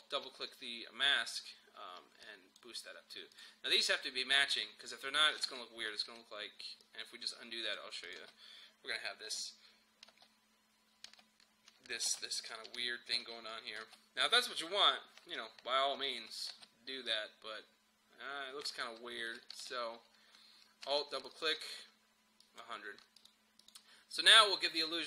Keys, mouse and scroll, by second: 2.3 click, 5.5 ctrl+z, 6.9 click, 8.2 space, 12.5-13.8 typing, 13.5 click, 16.5 space, 17.1-21.2 drag.